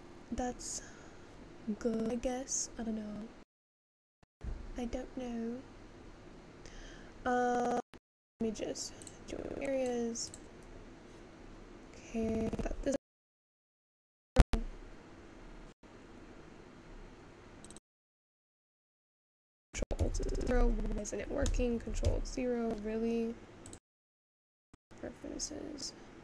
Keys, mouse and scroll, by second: 0.0 click, 10.8 click.